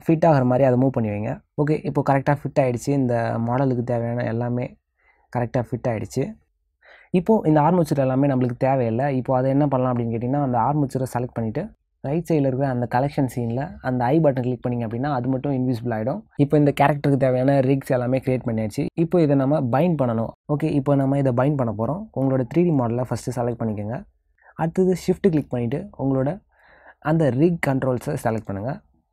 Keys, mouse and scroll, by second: 0.9 middle click, 3.7 click, 6.7 middle click, 9.4 click, 13.2 click, 13.9 click, 20.4 shift+click, 23.2 shift+click, 23.7 shift+click, 24.6 click, 26.9 shift+click.